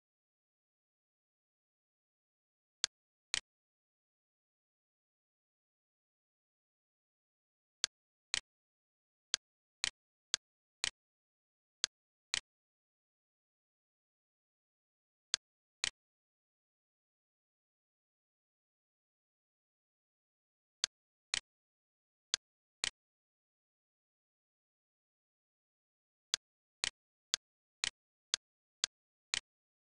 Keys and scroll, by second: 4.9 8, 5.4 -, 5.8 4, 6.5 5, 6.8 Return, 11.2 c, 13.4 Return, 14.2 e, 16.7-17.9 typing, 18.2 Return, 24.6 l, 28.0 Escape, 29.0-29.8 typing.